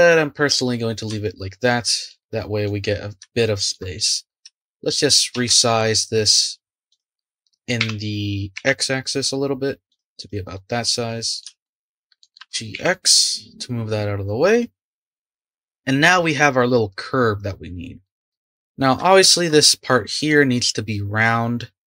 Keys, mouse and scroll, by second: 0.8-1.2 scroll down 2, 1.2-3.9 shift+middle drag, 3.9 click, 4.4 Tab, 5.3 Tab, 5.8 click, 6.9 click, 7.8 s, 10.2 click, 10.5-12.4 middle drag, 12.4 g, 18.0-19.5 middle drag, 19.5-19.9 scroll up 2, 19.9-21.6 middle drag, 21.6-21.8 scroll down 3.